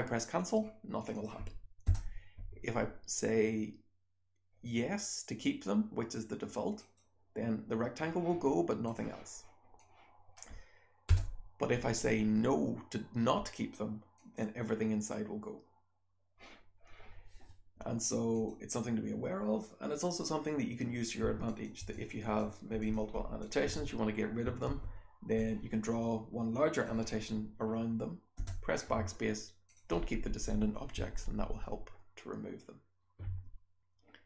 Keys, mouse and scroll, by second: 1.0 click, 1.1 click, 1.9 BackSpace, 8.8 click, 9.8 click, 11.1 BackSpace, 18.3 click, 21.2-23.6 typing, 21.5 click, 21.9 click, 22.3 click, 22.8 click, 23.4 click, 24.6 r, 25.4-26.8 drag, 28.4 BackSpace.